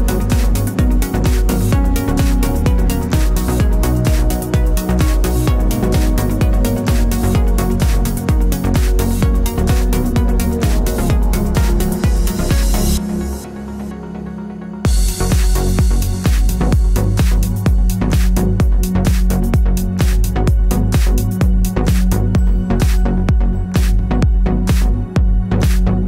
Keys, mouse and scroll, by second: 1.4 click, 2.4 alt+d, 5.9 click, 6.0 scroll down 1, 6.5 click, 9.7 shift+middle click, 10.4 shift+click, 10.9 Tab, 11.4 KP_1, 13.2 Tab, 14.9-16.2 middle drag, 15.3-15.6 scroll down 2, 16.2 click, 16.3 a, 16.6 click, 16.8 a, 18.6-20.8 right drag, 19.4 g, 20.8-22.9 middle drag, 22.7 KP_0, 23.2 scroll down 1, 23.4 shift+middle drag, 23.9 z.